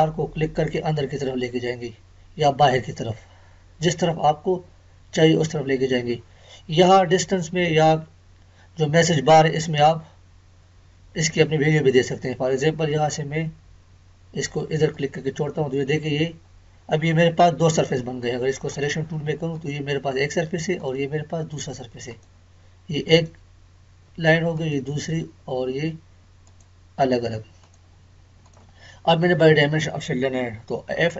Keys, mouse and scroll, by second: 14.9 click, 18.7 click.